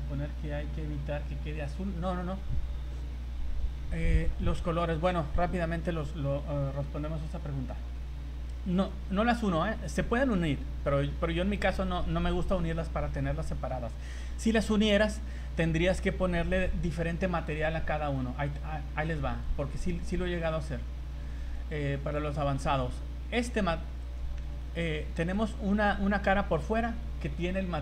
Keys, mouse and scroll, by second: 9.6-10.0 scroll up 5, 14.8 right click, 19.4 click, 21.4 click, 21.7 click, 22.4 z, 23.4 right click, 24.1 right click, 24.3 z, 24.8 middle click, 25.4 right click.